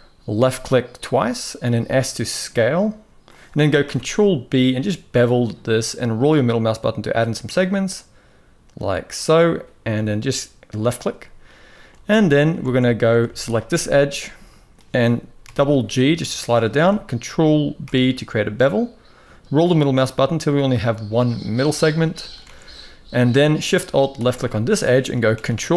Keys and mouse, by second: 3.6 ctrl+b, 11.5 shift+middle click, 11.8-12.2 middle drag, 12.3 alt+a, 13.5-14.5 middle drag, 15.2 g, 17.6 ctrl+b, 21.7 middle click, 22.2 alt+a, 22.8 middle click, 23.9 alt+shift+click, 24.2 middle click, 25.1 ctrl+b.